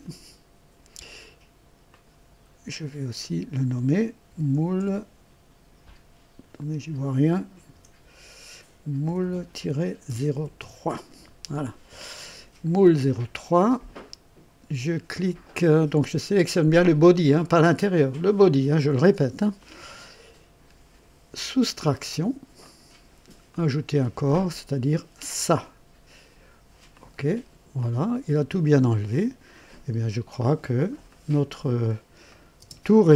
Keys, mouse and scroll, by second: 1.8 click, 3.2 F2, 4.0-5.8 typing, 7.7 BackSpace, 8.8-10.0 typing, 10.5 KP_Enter, 13.1-14.1 drag, 19.5 click, 21.8 click, 22.6 click, 23.4 click, 25.1 click, 26.9 click, 27.8-29.6 drag, 31.0 click, 32.2 click, 32.6 space.